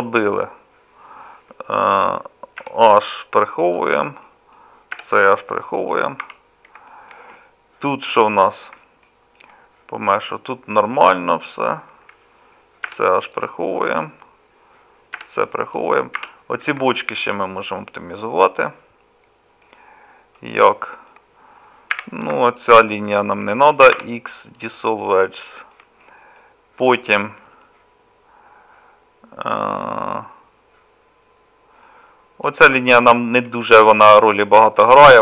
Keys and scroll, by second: 2.6 h, 5.0 h, 6.2 Tab, 7.1 h, 10.7 Tab, 12.9 h, 15.2 h, 16.2 Tab, 17.2 h, 22.0 2, 24.0 x.